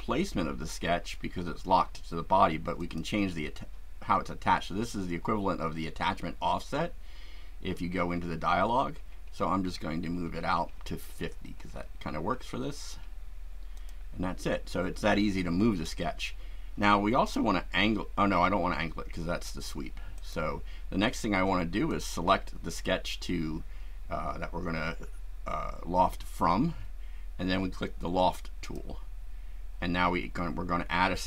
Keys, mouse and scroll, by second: 2.7 click, 4.3 scroll up 1, 4.9-5.9 scroll up 3, 6.2-6.6 scroll up 1, 7.5-8.6 scroll up 3, 9.6-10.2 scroll up 2, 11.1-11.7 scroll up 2, 11.8 scroll up 2, 13.8 click, 14.8 scroll down 1, 20.2 click, 21.9 click, 28.6 click.